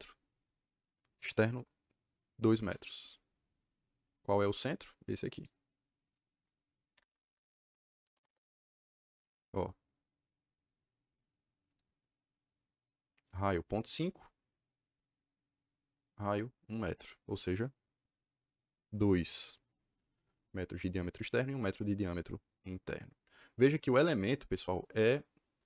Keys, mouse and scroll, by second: 2.3 KP_2, 2.5 KP_Enter, 4.4 click, 5.2 click, 6.0 click, 6.8 Escape, 7.0 Escape, 7.7-8.5 typing, 11.6 click.